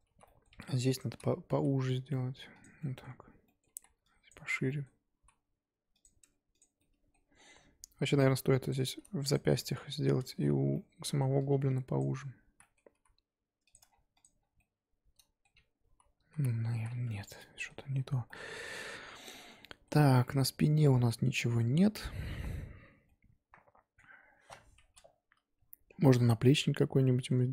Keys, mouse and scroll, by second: 0.1 z, 0.2 middle click, 0.5 1, 0.6 click, 1.1 z, 1.5 s, 2.8 middle click, 3.7 z, 4.3 click, 4.5 z, 4.7 middle click, 5.1 s, 6.2 Tab, 6.3-6.8 scroll down 3, 6.5 click, 6.8 middle click, 7.3-8.4 scroll up 1, 8.4 scroll up 1, 8.9 click, 8.9-9.3 scroll up 1, 9.3 shift+click, 9.7 z, 10.2 Tab, 10.7-12.0 middle drag, 12.0 click, 12.5 z, 12.6 middle click, 12.9 s, 13.8 Tab, 13.9-14.6 scroll down 7, 14.2 click, 14.6-15.8 middle drag, 15.8 ctrl+z, 16.1 ctrl+z, 16.7 ctrl+z, 17.0 Tab, 17.3 click, 17.4 middle click, 17.9-18.3 scroll up 2, 18.3-27.5 middle drag.